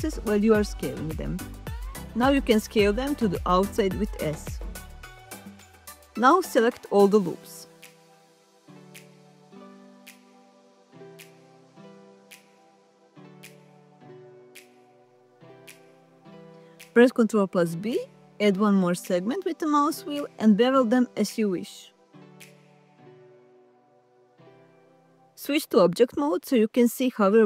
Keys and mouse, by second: 3.2 shift+s, 5.0 shift+click, 5.7 alt+shift+click, 7.2 alt+shift+click, 9.2 alt+shift+click, 10.8 alt+shift+click, 14.6 alt+shift+click, 16.4 ctrl+b, 25.1 Tab.